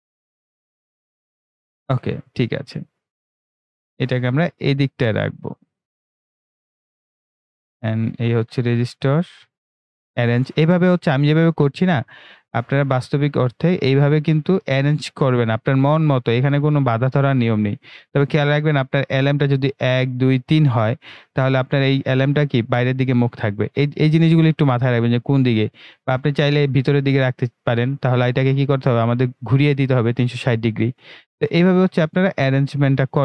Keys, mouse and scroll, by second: 1.1-24.4 drag, 24.4-33.2 drag.